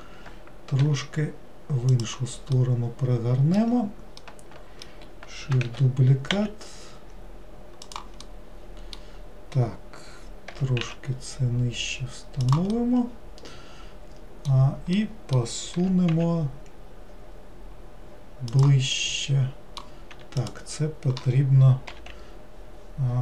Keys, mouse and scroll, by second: 2.6-5.7 middle drag, 5.7 shift+d, 8.3-10.6 middle drag, 10.6 g, 12.8-15.9 middle drag, 15.9 g, 19.0-20.4 middle drag, 20.4 click.